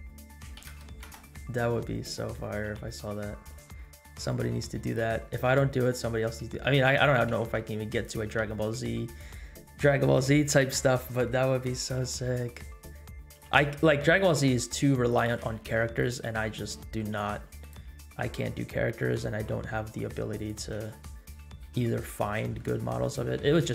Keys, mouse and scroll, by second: 1.8 middle click, 2.7 g, 3.8 middle click, 4.4 r, 5.7 middle click, 6.4 scroll up 1, 6.6 middle drag, 7.0 g, 8.4 r, 10.7 KP_7, 11.5 scroll up 2, 12.2 r, 13.5 g, 14.4 r, 15.3 g, 16.4 middle click, 16.8 r, 17.1 g, 17.9 scroll down 2, 18.1 middle click, 18.9 r, 20.6 g, 21.8 middle click, 22.8 r, 23.3 g.